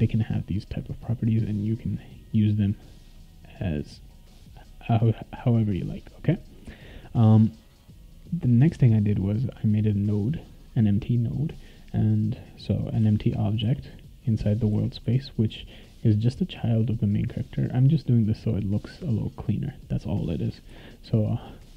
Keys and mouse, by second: 2.0 click, 2.7 click, 3.9 click, 9.2 click, 12.4-15.5 right drag, 13.0-15.5 typing, 20.7 ctrl+s.